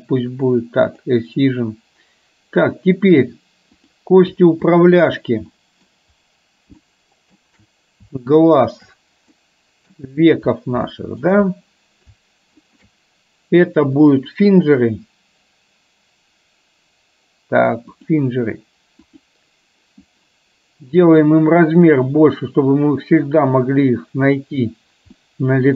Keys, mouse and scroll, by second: 0.9 click, 4.8 shift+click, 5.7 middle drag, 6.9 shift+middle click, 8.8 shift+click, 9.4-9.9 middle drag, 10.9-11.3 shift+middle drag, 12.8 shift+click, 14.3-18.2 drag, 19.2 click, 21.0 click, 21.8-25.4 drag, 25.4 middle click.